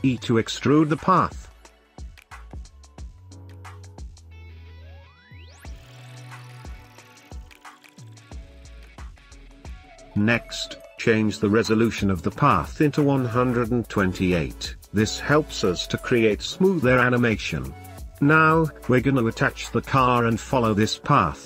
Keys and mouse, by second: 0.8 click, 0.8 g, 1.6 shift+click, 1.9 click, 2.1 g, 3.6-9.5 typing, 4.3 ctrl+z, 5.1 ctrl+shift+z, 5.1 shift+click, 5.3 shift+click, 5.6 ctrl+z, 5.9 shift+click, 7.3 click, 8.0 Tab, 8.2 click, 8.7 click, 9.0 Tab, 9.1 Tab, 9.5 Tab, 10.6 Tab, 10.9 Tab, 12.3 click, 14.7-15.9 drag, 16.3 click, 17.8-18.5 middle drag, 19.3 shift+middle click, 20.8 shift+middle click.